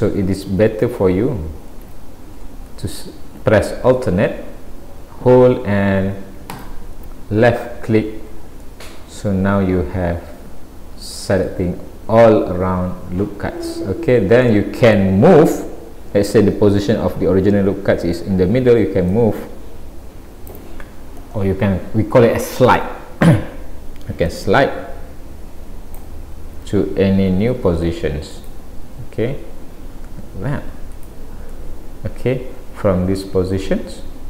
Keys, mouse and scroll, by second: 1.9 alt+a, 2.3-2.9 scroll up 4, 6.5 alt+click, 7.9-8.6 scroll down 5, 8.7 middle click, 11.5 middle click, 14.0-14.5 scroll up 1, 14.5 middle click, 19.2 click, 24.3 click, 27.3 ctrl+r, 31.6 middle click.